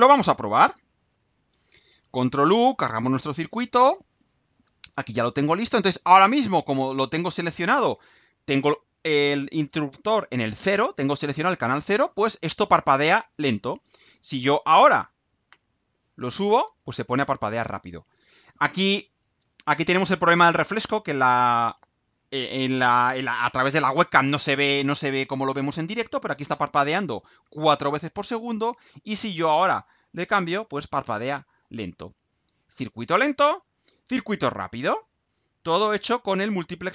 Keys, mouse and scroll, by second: 0.7 ctrl+u.